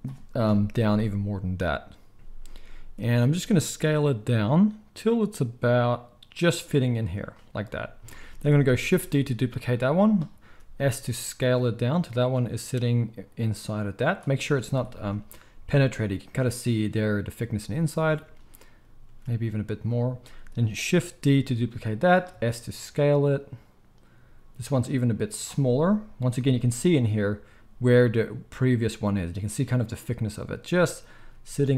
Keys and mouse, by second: 0.4 KP_0, 0.9 s, 2.1 ctrl+z, 2.1-31.7 middle drag, 2.1 KP_1, 3.1 s, 9.3 shift+d, 10.4 s, 19.0 s, 21.5 shift+d, 22.3 s, 31.1 s.